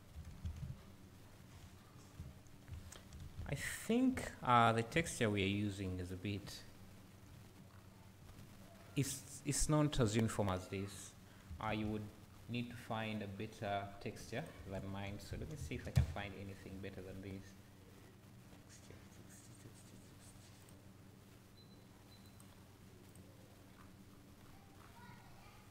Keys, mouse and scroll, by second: 1.9-2.2 scroll down 1, 2.2 `, 2.9-3.6 scroll up 1, 3.6 `, 4.9 `, 6.5 `.